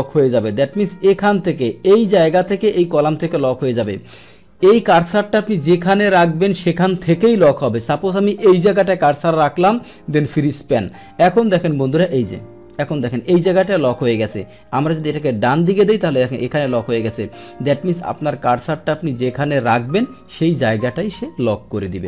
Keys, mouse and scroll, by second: 1.6 click, 2.3 click, 3.7 click, 4.8 click, 8.6 click, 9.7 click, 10.3 click, 11.4-11.9 scroll down 1, 11.9 scroll up 1, 12.2-12.8 scroll down 2, 12.8-13.4 scroll up 2, 15.0-18.6 drag, 19.5 click, 20.1 click.